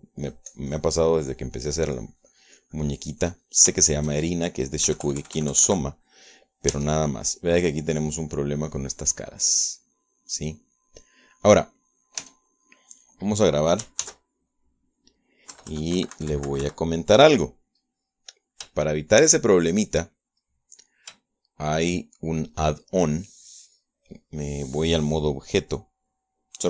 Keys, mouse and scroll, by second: 0.8 middle click, 1.4-2.6 drag, 2.6 middle click, 3.2-4.4 drag, 4.4 middle click, 6.0 KP_Add, 7.9 Tab, 8.8-13.4 middle drag, 13.4 Tab, 13.7-14.9 middle drag, 15.2 ctrl+s, 15.7 ctrl+click, 16.7 KP_Add, 17.2 KP_Subtract, 18.2-19.9 middle drag, 20.0-22.4 shift+middle drag, 22.5 shift+middle click.